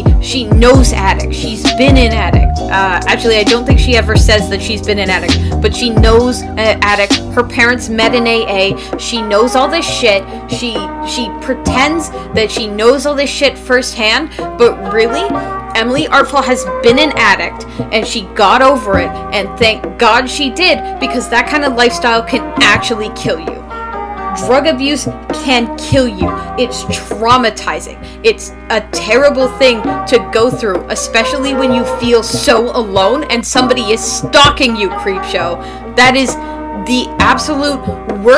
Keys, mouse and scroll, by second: 1.7 space, 13.5 space, 14.2 space, 17.7 space, 18.3 space, 19.5 space, 21.0 space, 23.3 space, 26.1 space, 28.2 space, 32.2 space, 33.6 space.